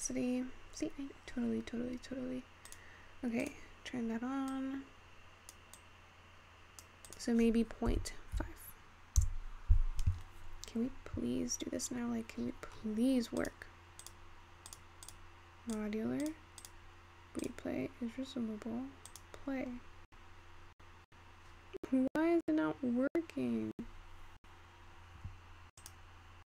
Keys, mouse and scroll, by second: 1.5-2.8 scroll up 6, 2.8-3.9 drag, 4.5-10.2 drag, 10.5 scroll down 4, 12.5-13.5 scroll down 27, 13.5-15.9 drag, 16.3-17.6 drag, 19.1-22.6 drag, 26.2-26.4 drag.